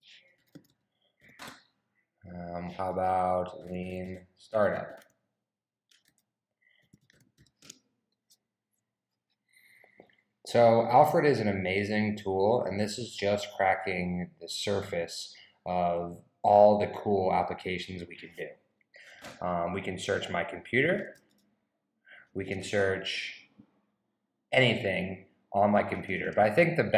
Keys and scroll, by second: 0.1-1.6 typing, 3.4-7.9 typing, 20.6-21.8 typing.